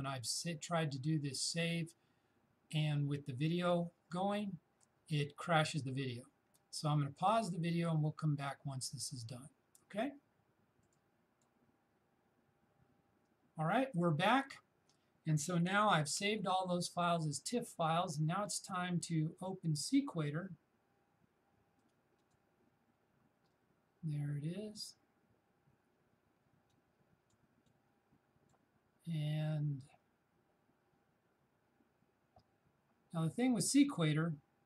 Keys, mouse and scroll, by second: 10.8 click, 21.8 click, 26.8-30.9 drag.